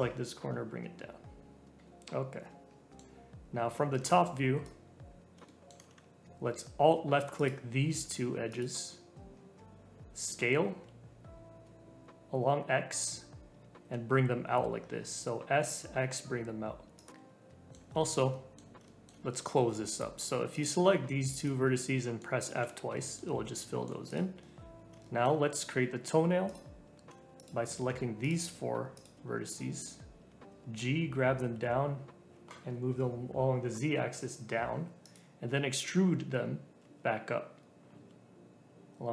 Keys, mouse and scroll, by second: 0.1 g, 1.8-4.0 middle drag, 4.0 click, 5.4-7.3 shift+middle drag, 7.3 alt+click, 8.5 alt+shift+click, 10.2 s, 17.1-19.3 middle drag, 19.3-20.5 scroll up 1, 20.5 click, 21.3 shift+click, 21.7 middle click, 22.4 f, 22.9 middle click, 23.3 f, 23.6 middle click, 24.0 click, 24.4-26.4 middle drag, 26.4 click, 27.3 shift+click, 28.2 shift+click, 28.9 shift+click, 29.4-30.4 middle drag, 30.4 click, 30.6 g, 35.6 e.